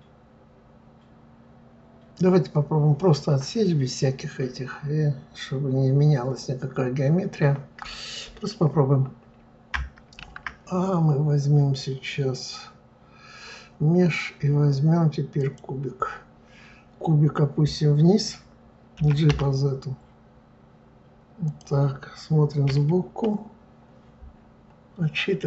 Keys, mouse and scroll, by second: 4.2-5.1 scroll up 1, 5.1-7.5 scroll down 1, 10.2 shift+a, 19.0 g, 21.4 g, 22.6 KP_1, 24.4-25.4 scroll up 1.